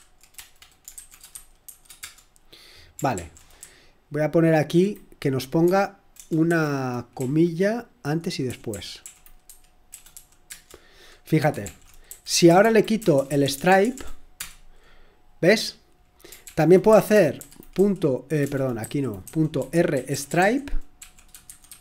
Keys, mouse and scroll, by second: 0.0-1.7 typing, 2.0 Return, 3.1 ctrl+p, 3.6 Left, 4.2 Left, 4.3 Left, 4.3 Left, 4.5 Left, 5.6 0, 6.4 ', 7.1 Right, 7.5-14.3 typing, 12.3 Left, 12.4 Left, 12.6 Left, 13.0 Left, 16.4-17.8 typing, 18.8 Left, 19.2 Left, 19.5-21.8 typing.